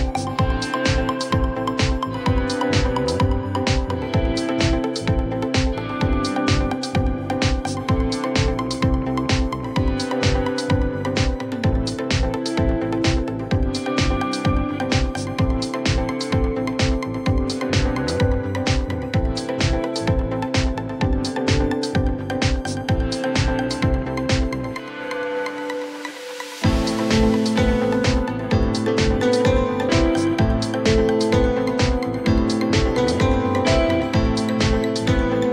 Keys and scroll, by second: 0.2 F3, 1.3 alt+x, 5.4 F4, 6.5 BackSpace, 7.1 ctrl+z, 8.2 F3, 11.7 F3, 15.0 BackSpace, 17.4 ctrl+shift+e, 18.6 ctrl+shift+e, 21.6 alt+1, 25.2 r, 31.0 w, 32.4 ctrl+shift+c.